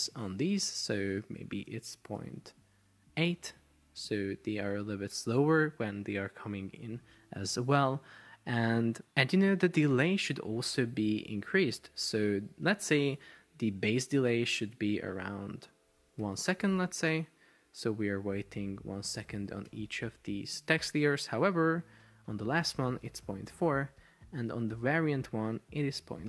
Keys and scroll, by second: 2.1 Up, 3.7 Down, 4.0 Up, 5.1 Return, 16.3 1, 16.5 Return, 19.3 1, 19.8 Return, 22.6-23.9 typing.